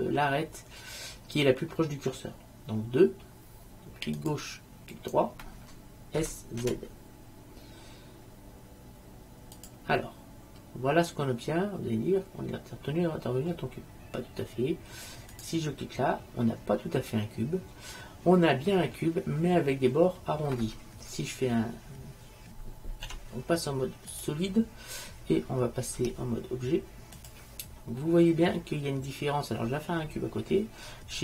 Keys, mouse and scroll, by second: 2.4-4.0 drag, 4.5 click, 6.3 s, 10.1 middle click, 15.5-17.2 drag, 17.2-18.3 middle drag, 18.5-20.0 middle drag, 20.1 middle click, 23.2 z, 26.1 Tab.